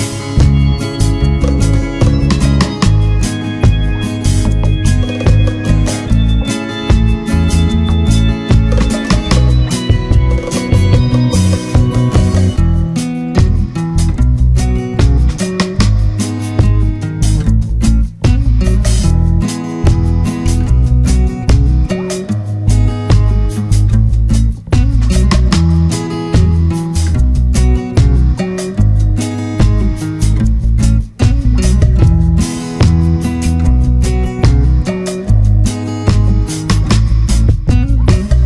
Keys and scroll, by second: 8.5 ctrl+-, 9.7 ctrl+z, 10.7 ctrl+=, 10.8 ctrl+space, 20.2 ctrl+-, 25.8 Return, 26.8 ctrl+=.